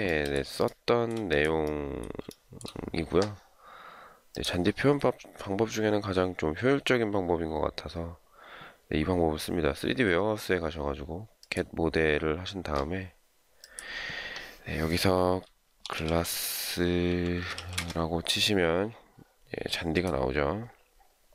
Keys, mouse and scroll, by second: 0.6 shift+middle click, 2.3 shift+middle click, 16.7-18.0 typing.